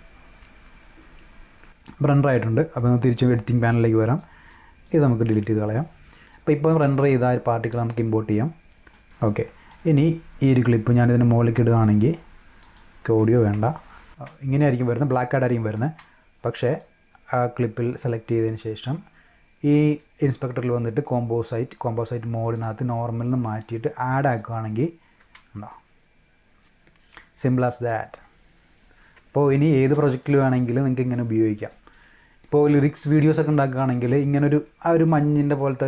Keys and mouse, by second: 4.0 click, 4.4-4.8 drag, 6.2 right click, 7.7 click, 9.6-11.7 drag, 12.5 click, 13.5 BackSpace, 14.1 space, 16.6 click, 22.5 click, 24.2 click, 35.0 click.